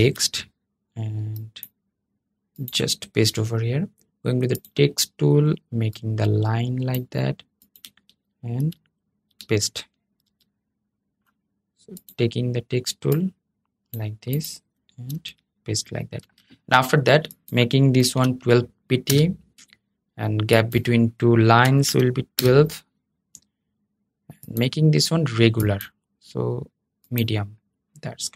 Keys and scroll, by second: 8.3 super+v, 10.0 super+z, 14.8 super+v, 15.9 super+a.